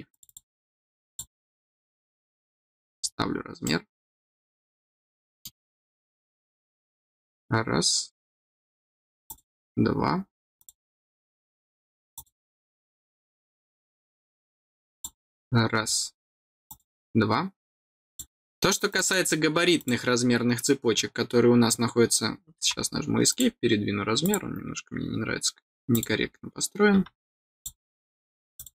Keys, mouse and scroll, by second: 0.0 click, 1.0 click, 2.3 middle click, 3.0 scroll down 1, 3.6 middle click, 4.5 scroll down 1, 5.1 middle click, 7.1 click, 9.2 click, 10.3 click, 10.5 click, 12.1 click, 14.8 click, 15.7 middle click, 15.7-16.0 scroll down 1, 16.6 click, 18.0 click, 18.8 click, 19.7 click, 23.2 click, 24.1 click, 25.8 click, 27.5 click, 28.5 click.